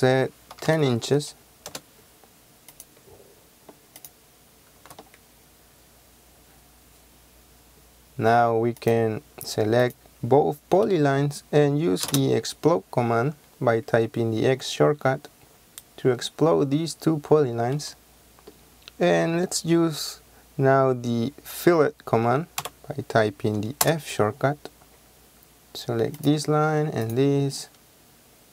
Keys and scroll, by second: 0.7 KP_1, 0.8 KP_0, 1.8 Return, 4.8 space, 12.1 x, 12.1 space, 22.7 f, 24.0 Return.